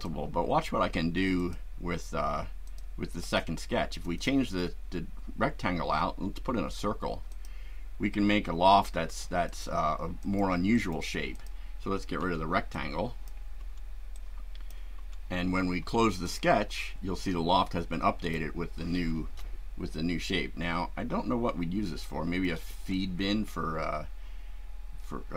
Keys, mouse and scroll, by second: 1.4 click, 2.6 click, 3.2 click, 3.9 click, 7.3 click, 9.4 click, 10.2 click, 10.7 right click, 11.3 click, 12.2 Delete, 12.7-13.4 drag, 13.6 Delete, 14.1-14.9 drag, 16.2 click, 18.2 click, 19.9-22.6 shift+right drag, 22.9-25.3 shift+right drag.